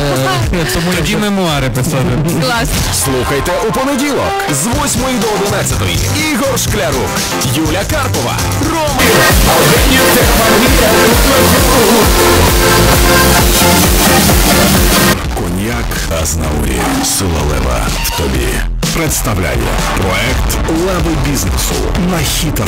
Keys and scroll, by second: 15.1 Page_Down.